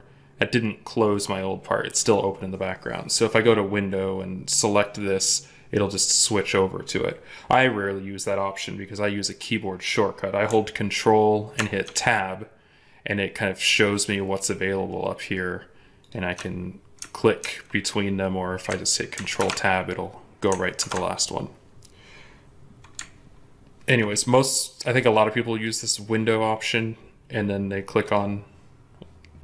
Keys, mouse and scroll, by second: 11.4 ctrl+Tab, 15.9 ctrl+click, 17.3 ctrl+Tab, 19.2 ctrl+Tab.